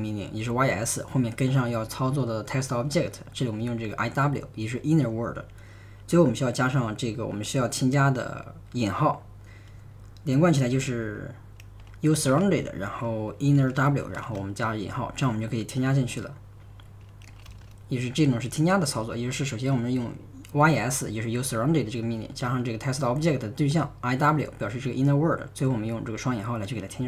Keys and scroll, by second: 11.9-14.2 typing, 16.4-18.0 typing, 26.7-27.0 typing.